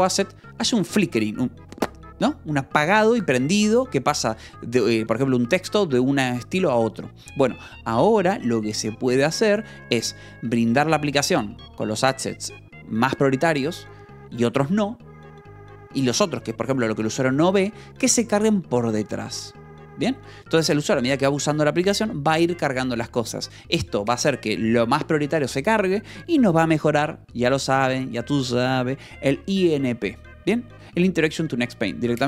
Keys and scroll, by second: 9.9 Escape, 31.2 Escape.